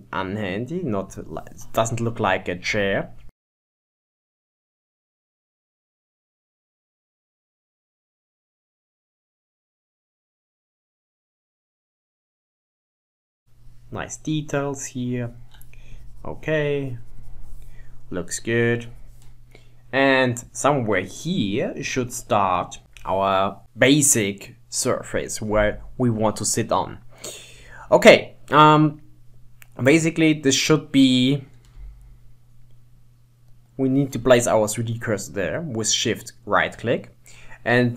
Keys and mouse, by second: 2.8 Tab, 3.4 ctrl+Tab, 3.9-11.8 drag, 11.8 ctrl+z, 12.0-17.1 drag, 18.7 click, 21.1 click, 23.6-27.6 drag, 33.6 shift+right click, 37.8 shift+right click.